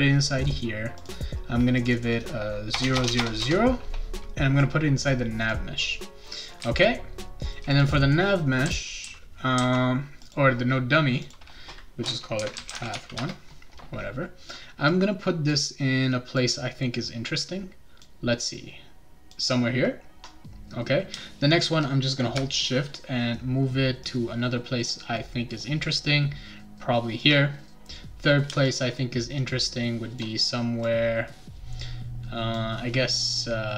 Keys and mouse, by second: 1.0 click, 1.8 click, 1.9 click, 2.8 Tab, 3.1 Tab, 4.6 click, 6.3-7.5 right drag, 6.6 w, 7.7 click, 8.4-9.6 right drag, 8.6 a, 9.0 s, 9.5 d, 10.2 click, 11.2 click, 12.1-13.4 typing, 14.9 click, 16.3-18.0 drag, 18.5 click, 24.0-27.2 shift+drag, 28.7-30.2 shift+drag, 30.8-32.5 drag.